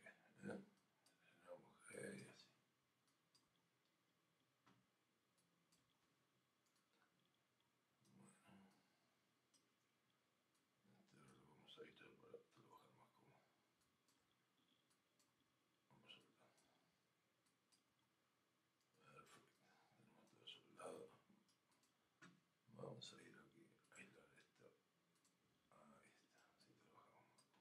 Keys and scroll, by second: 6.7 alt+g, 18.8 alt+g.